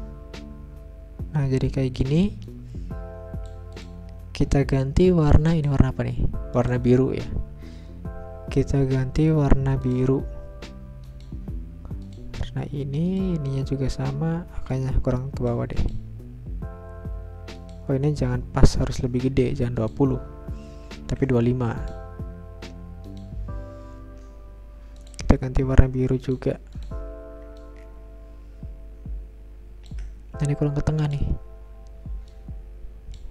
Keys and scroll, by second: 20.6-21.5 typing, 24.0 Return.